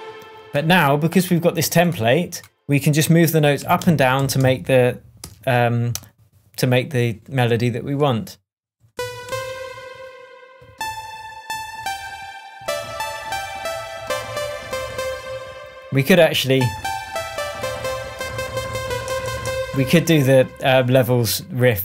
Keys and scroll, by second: 3.6 Up, 4.1 Down, 5.2 p, 8.9 Up.